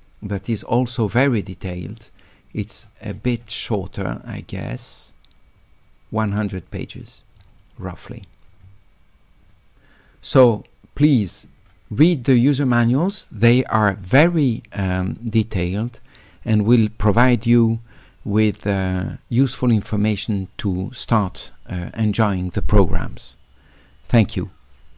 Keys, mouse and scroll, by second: 1.8-3.3 middle drag, 3.4 middle click, 3.4 scroll up 1, 3.7 middle click, 4.3-5.8 middle drag, 7.4 middle click, 9.4 click, 11.6 click.